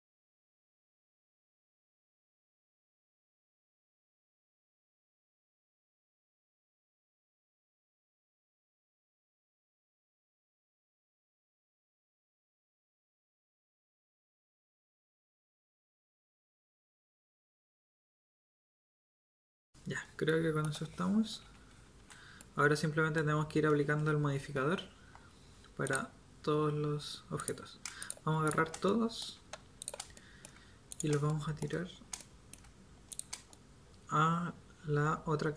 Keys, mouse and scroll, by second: 0.0-1.3 typing, 2.3-5.8 typing, 7.6-11.6 typing, 10.0 click, 11.9 drag, 12.7 click, 12.7-15.4 typing, 16.8 KP_7, 17.1 KP_1, 17.4 g, 18.6 KP_1, 19.6 KP_7, 21.4 a, 21.9 z, 30.0-30.9 right drag.